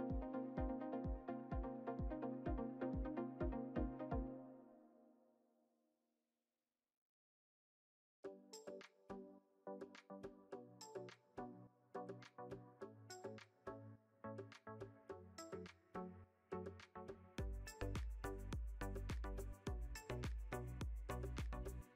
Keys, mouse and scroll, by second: 0.4 click, 2.7-5.8 shift+middle drag, 6.2-6.8 middle drag, 6.8-7.6 scroll up 2, 7.8-10.8 drag, 7.8 scroll up 1, 12.6 click, 14.3-17.4 drag, 18.6 scroll down 2, 18.9 Tab, 19.5-20.2 shift+middle drag.